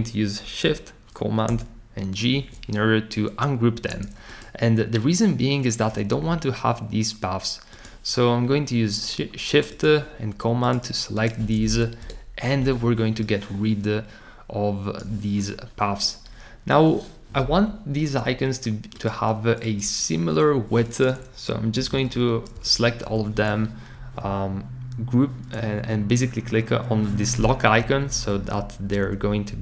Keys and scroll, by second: 1.5 shift+super+g, 12.0 BackSpace, 21.5-22.4 typing, 22.5 Return, 27.6 shift+Up, 27.8 shift+Up, 28.0 shift+Up, 28.3 shift+Down, 28.8 shift+Down, 29.5 Up.